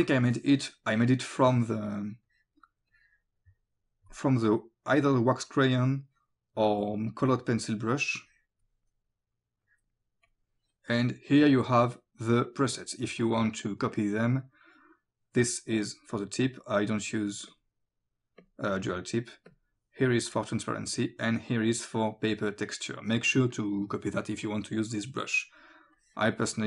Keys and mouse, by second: 0.3 click, 1.4 click, 8.3 click, 9.7 click, 17.5 click, 19.5 click, 21.3 click, 24.2 click, 26.0 click.